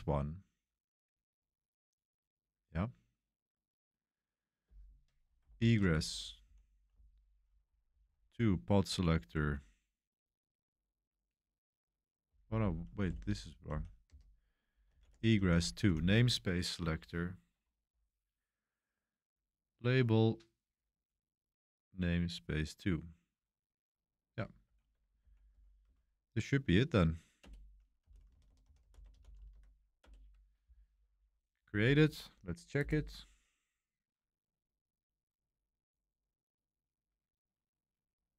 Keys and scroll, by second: 5.4 Escape, 5.8-9.7 typing, 12.0-16.3 typing, 24.9-25.8 typing, 27.4 Return, 27.7-30.0 typing.